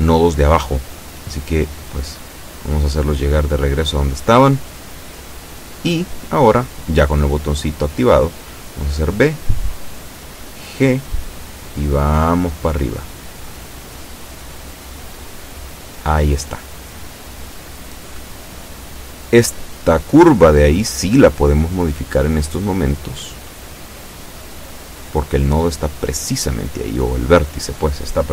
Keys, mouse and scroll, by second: 0.5 shift+right click, 1.0 shift+right click, 1.6 shift+right click, 3.2 g, 4.5 click, 5.2 KP_7, 7.8 b, 8.4 click, 10.3 g, 12.2 click, 14.6 a, 15.1 shift+middle click, 15.5 shift+scroll up 1, 16.0 scroll down 1, 17.1 scroll up 1, 17.6 shift+middle click, 18.1-18.5 shift+scroll up 1, 19.4 b, 19.7 click, 20.9-22.4 drag, 22.9 scroll down 1, 23.4 shift+middle click, 24.4-24.7 shift+scroll up 3, 25.0 shift+middle click, 26.3-26.9 scroll down 4, 27.2 shift+middle click.